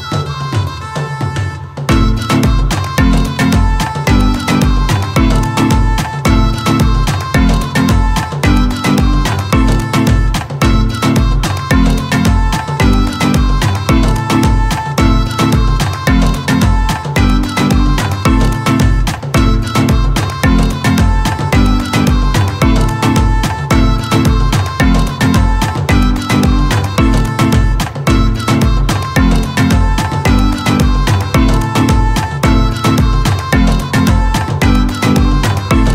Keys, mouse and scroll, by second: 0.9 ctrl+space, 1.0 ctrl+click, 1.5 ctrl+space, 2.1-10.8 ctrl+drag, 10.8-19.4 drag, 19.4 alt+scroll down 1, 21.0 ctrl+click, 21.1 ctrl+space, 23.3-25.0 ctrl+drag, 25.0-35.9 ctrl+drag.